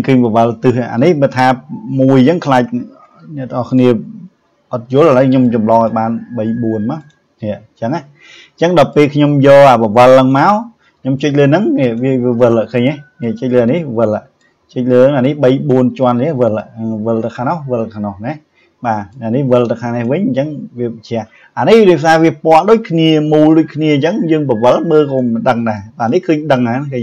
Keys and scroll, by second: 2.9 ctrl+z.